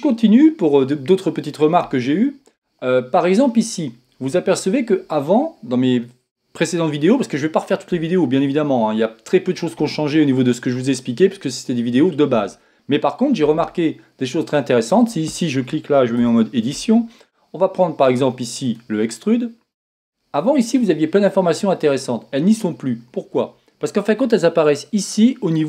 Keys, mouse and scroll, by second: 16.2 Tab, 18.8-20.0 drag.